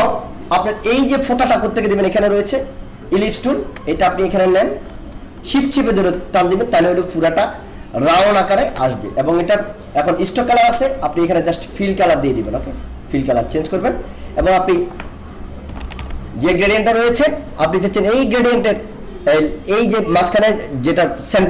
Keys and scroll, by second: 15.8 ctrl+=.